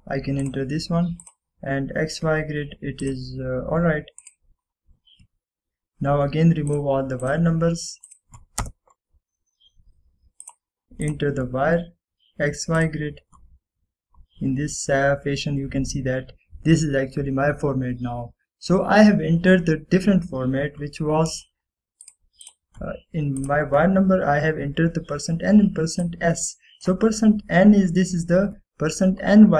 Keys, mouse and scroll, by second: 1.5 click, 7.2 scroll down 1, 7.8 click, 9.7 Return, 10.6-11.5 scroll up 1, 11.5 click, 15.3-15.7 scroll up 1, 22.4 right click, 23.1 click, 27.1-28.0 drag.